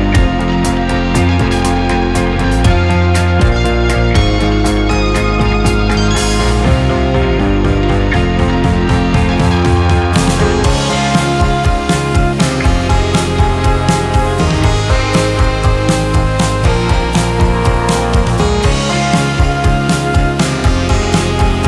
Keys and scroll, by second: 13.7 F3.